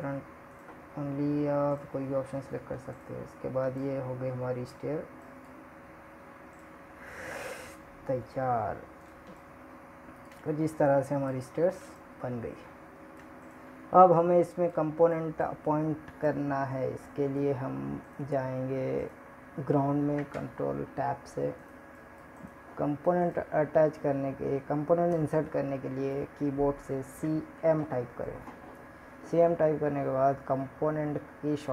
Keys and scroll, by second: 16.1 ctrl+Tab.